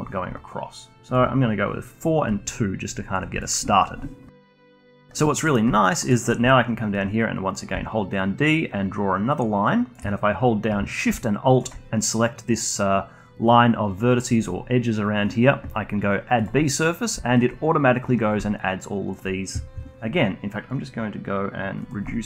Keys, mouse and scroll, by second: 0.3-4.3 drag, 5.4 middle click, 5.7 alt+click, 6.1-7.7 alt+middle drag, 7.7 d, 8.1-9.9 drag, 9.9 d, 11.5 alt+shift+click, 16.3-21.6 drag, 21.8-22.2 drag.